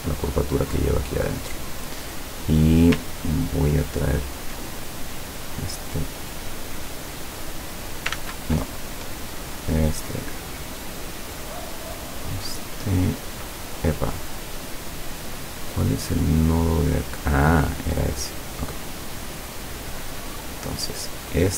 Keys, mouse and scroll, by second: 0.3 click, 1.4 click, 2.2 click, 3.1-3.6 ctrl+scroll up 2, 4.1-4.5 ctrl+scroll up 2, 4.7 ctrl+click, 5.9-8.3 drag, 8.2 ctrl+z, 9.2 click, 9.6 click, 10.5-12.3 drag, 12.4 click, 13.8-14.9 middle drag, 16.3-18.1 drag, 18.5-20.9 drag.